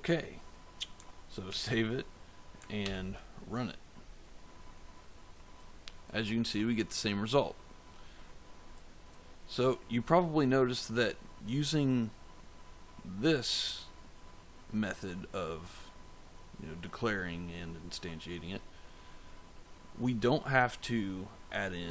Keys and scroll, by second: 1.4 ctrl+s, 2.7 ctrl+F5.